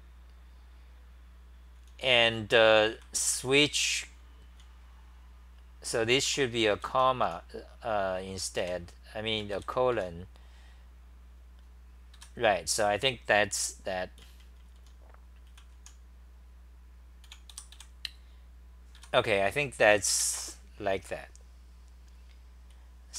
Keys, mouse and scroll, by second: 2.7-4.6 typing, 6.3 5, 7.2 t, 8.4-9.1 typing, 10.0 Home, 12.2 ', 14.2-17.5 typing, 19.0-20.6 typing, 22.8-23.1 c.